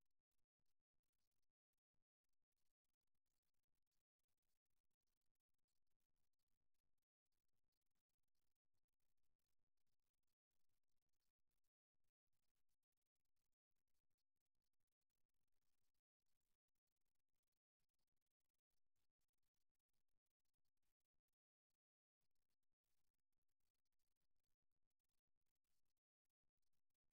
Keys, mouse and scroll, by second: 4.1-7.7 middle drag, 7.7 ctrl+r, 10.7-12.5 drag, 12.7-16.7 middle drag, 16.7 ctrl+r, 19.3 click, 20.2 click, 21.2-23.1 middle drag, 24.7-26.6 right drag, 25.5 click, 26.6 click.